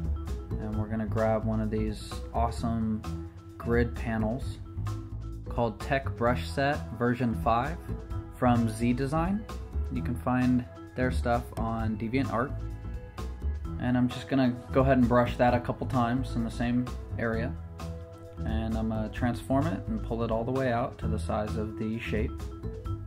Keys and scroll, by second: 8.9 ], 10.8 ], 18.0 super+z, 18.1 super+t, 21.8 Return.